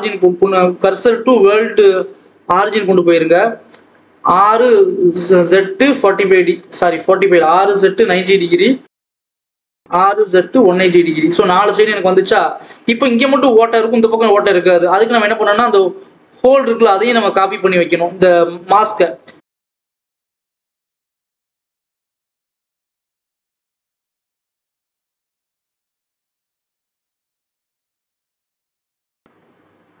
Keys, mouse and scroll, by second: 2.0 shift+s, 2.7-4.0 scroll down 1, 4.0 r, 6.6 ctrl+z, 7.3 r, 8.8 a, 9.2 shift+d, 9.7 r, 11.2 Tab, 12.0 alt+a, 12.3 click, 16.6 click, 17.3 click, 17.9-18.3 scroll up 1, 18.3 click, 18.5-18.8 scroll down 1, 18.8 scroll up 1, 19.1-20.9 scroll down 1, 20.9 click, 22.8 click, 23.2 KP_7, 23.3 a, 23.5 scroll down 1, 23.8 shift+d, 24.4 r, 26.2 scroll down 1, 26.2 a, 26.5 shift+d, 26.9 r, 27.6 Tab, 27.8 alt+a, 28.2 click, 28.5-29.3 scroll up 1, 29.3 click, 29.7-30.0 scroll up 1.